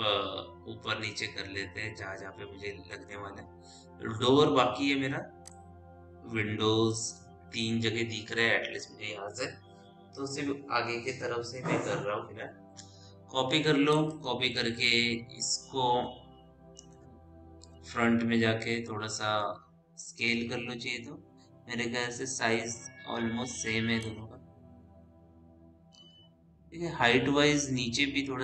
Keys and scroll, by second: 17.6 f.